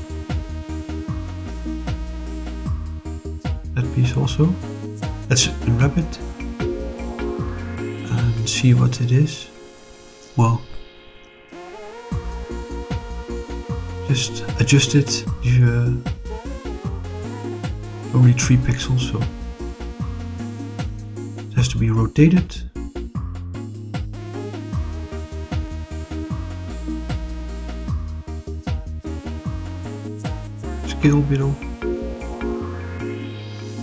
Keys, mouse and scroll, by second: 0.7 scroll down 2, 1.1 middle click, 2.0 click, 2.6-3.9 middle drag, 4.2 middle click, 5.7 click, 6.1 click, 8.4 click, 13.7 click, 14.3 click, 15.9 click, 17.4-19.0 drag, 19.2 click, 20.5 click, 20.9-21.6 drag, 23.2 click, 24.2 9, 24.4 0, 25.8 Return, 26.6 r, 27.0 9, 27.2 0, 27.5 Return, 30.4 click, 31.0-32.9 drag.